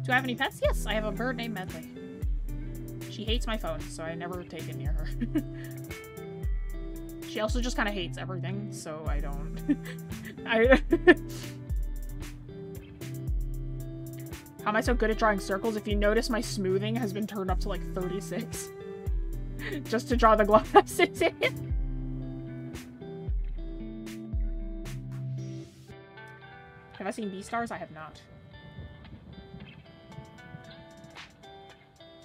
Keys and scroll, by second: 7.0 ctrl+z, 16.8 ctrl+z.